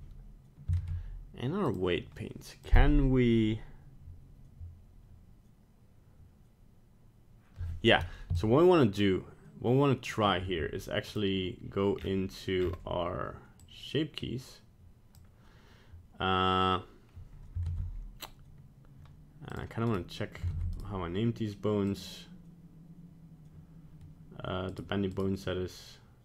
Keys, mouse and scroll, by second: 0.8 ctrl+Tab, 2.6 click, 8.4 shift+click, 11.1 click, 12.0-12.6 scroll down 5, 12.6-13.1 scroll up 7, 13.6 click, 17.7 ctrl+Tab, 19.9 right click, 20.5 ctrl+Tab, 20.8 right click, 21.9 click, 24.8 right click, 25.2 right click.